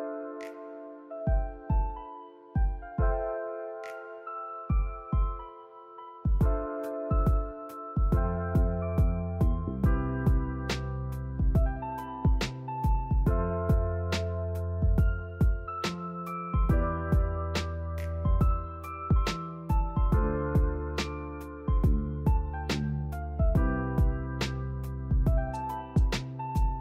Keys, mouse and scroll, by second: 1.0 ctrl+r, 3.0 ctrl+r, 4.3 shift+middle click, 4.5-5.4 scroll up 2, 5.4 ctrl+r, 6.9 scroll down 3, 7.3 click, 7.7-9.0 shift+middle drag, 9.0 click, 9.1 Tab, 9.3 drag, 9.5 shift+middle click, 10.1 click, 10.4 shift+a, 11.7 click, 12.0 Tab, 12.2 shift+a, 13.3-14.8 drag, 15.5 r, 18.3 s, 18.8 s, 19.4 p, 19.8 Tab, 20.1 click, 20.4 Tab, 20.8 click, 21.0 scroll up 3, 21.3 shift+middle click, 21.6 a, 21.7 g, 23.3 g, 24.9 click, 25.0 click, 25.6 click, 26.0 shift+middle click, 26.5 g.